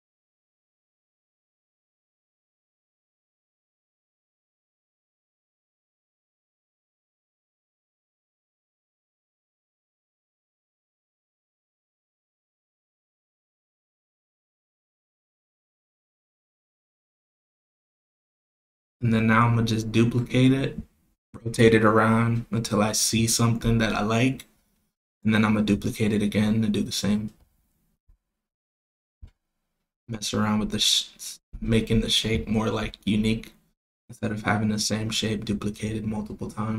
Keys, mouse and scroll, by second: 0.4-5.8 drag, 6.3 click, 7.4 click, 8.5-12.5 drag, 13.0 click, 13.3 click, 14.9 click, 16.6 click, 18.4 shift+d, 19.8 r, 21.3 r, 25.0 click, 25.8 click, 27.7 click, 29.1 click, 30.8 click, 31.4 click, 32.3 click, 33.5 click, 34.8 click, 36.2 click.